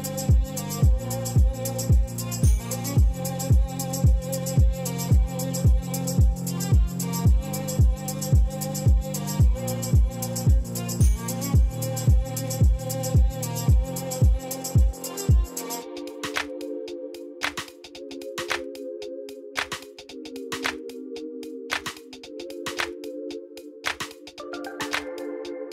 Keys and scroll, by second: 4.0 alt+a, 9.0 h, 17.2 alt+a, 22.2 alt+a, 25.2 \.